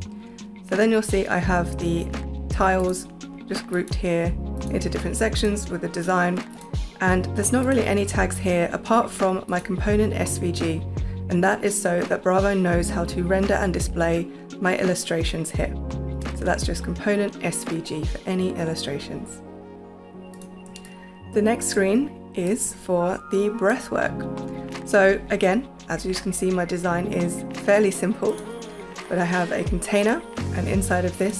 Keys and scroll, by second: 20.6 space, 21.8 space, 23.8 space.